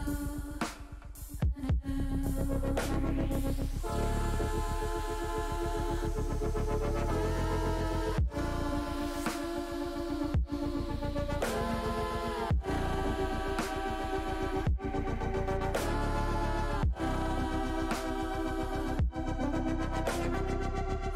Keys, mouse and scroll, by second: 0.7 middle click, 2.1 KP_0, 3.1 KP_0, 5.2-8.9 middle drag, 18.4-21.1 drag.